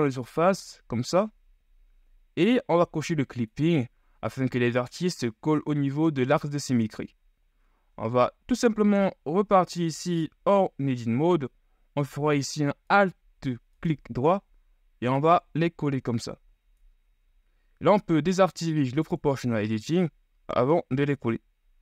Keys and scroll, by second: 8.9 Tab, 17.3 ctrl+z.